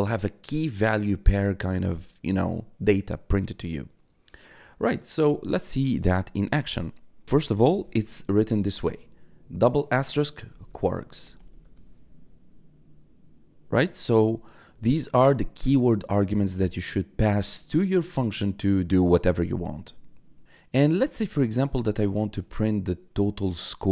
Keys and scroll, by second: 7.2 BackSpace, 7.4 *, 8.9 4, 10.2-11.4 typing.